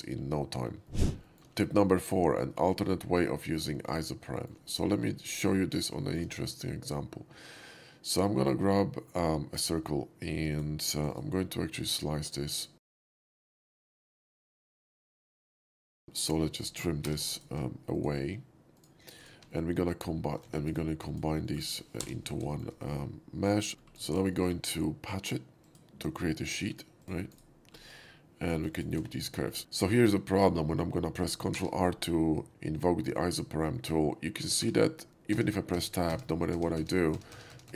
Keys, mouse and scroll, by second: 1.2 shift+middle click, 4.4 middle click, 5.4 alt+middle click, 6.0 shift+middle drag, 8.1-9.6 shift+drag, 10.4 click, 10.9 click, 11.1 right click, 11.5 middle click, 12.3 click, 13.3 click, 13.9 click, 14.2 right click, 14.5 middle click, 17.1 t, 17.4 drag, 17.9 click, 18.8 click, 19.2 click, 19.4 2, 19.6 drag, 20.4 ctrl+z, 20.6 right click, 20.9 click, 21.4 shift+middle click, 21.9 j, 22.5 middle click, 22.5 shift+j, 24.0 shift+middle drag, 24.2 shift+middle drag, 25.5 shift+click, 26.3-26.6 shift+middle drag, 27.0 click, 27.3 right click, 28.4 click, 28.4 middle click, 28.8 shift+click, 29.2 x, 29.3 middle click, 31.5 ctrl+r, 33.8 shift+middle click, 34.5 Tab, 35.8 Tab.